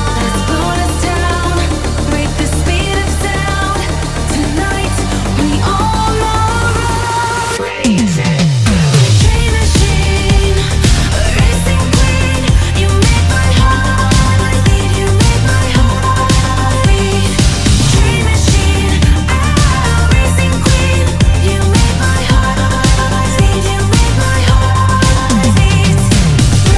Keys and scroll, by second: 23.5 ctrl+s.